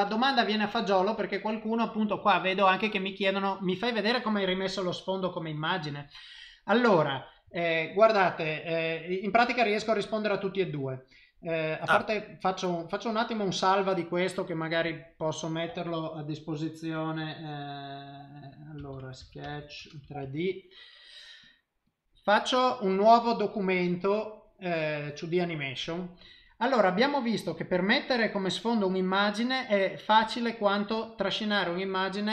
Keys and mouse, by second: 3.6 middle click, 8.2 click, 12.2 click, 23.2 click.